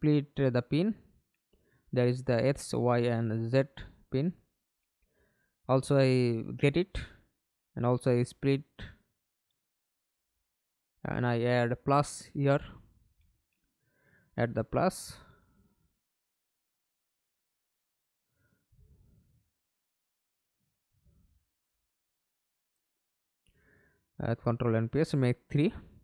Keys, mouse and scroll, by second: 0.6 right click, 3.2 right click, 6.6 double click, 9.4 right click, 16.4 Return, 19.2 ctrl+c, 20.0 ctrl+v, 22.3 ctrl+v.